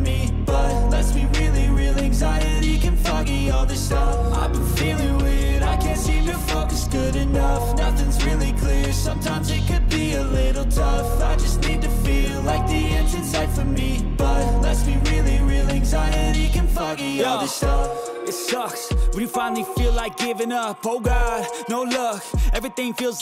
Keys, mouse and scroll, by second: 1.2 click, 2.7 click, 2.7 right click, 3.7 3, 4.1 click, 4.1 right click, 4.7 shift+click, 4.7 shift+right click, 6.0-8.8 drag, 9.2 middle click, 9.6-12.2 scroll down 3, 10.5-12.6 middle drag, 12.8-13.4 scroll up 2, 14.9 click, 16.8 click, 18.3 click, 18.9 middle click, 21.6 click, 22.5 click.